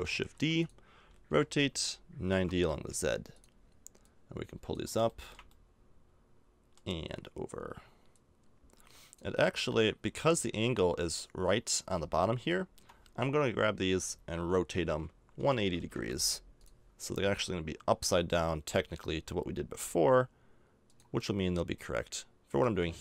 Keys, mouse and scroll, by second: 0.3 shift+d, 1.3 r, 4.8-5.8 drag, 6.5 middle click, 9.4 middle click, 9.9 middle click, 12.4 KP_3, 13.8 r, 17.9 g, 21.3 middle click, 21.4 middle click.